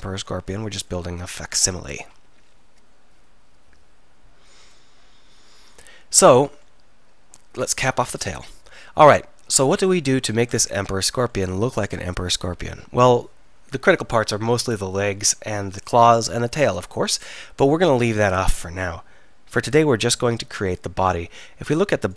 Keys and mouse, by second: 7.7 click, 8.1 f.